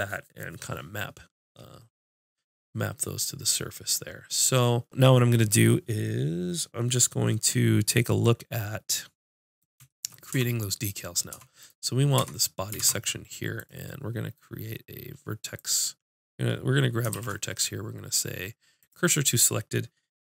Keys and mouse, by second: 10.3 Tab, 11.3 Tab, 11.6 click, 12.2 Tab, 12.8 ctrl+Tab, 15.6 click, 17.1 shift+s.